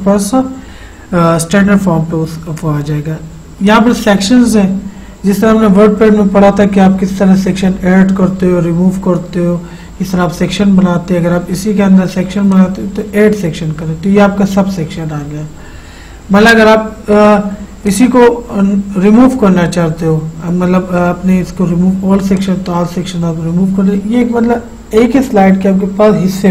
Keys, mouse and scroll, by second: 3.7 click, 12.5 click, 17.9 click, 22.4 click.